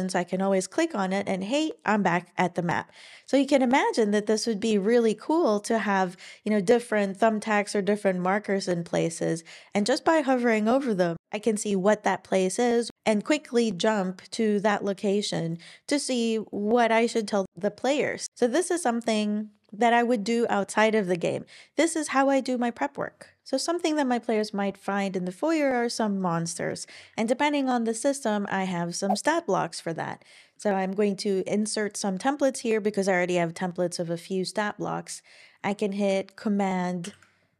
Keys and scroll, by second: 37.0 super+;.